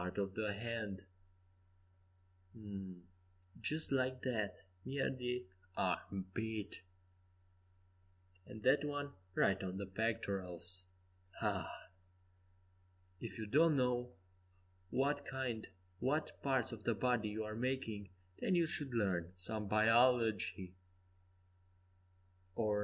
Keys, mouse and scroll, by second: 0.4 g, 6.2 a, 7.2 g, 8.6 c, 11.7 g, 14.4 click, 15.1 click, 15.4 a, 16.4 c, 18.0 g, 20.6 a, 21.9 c.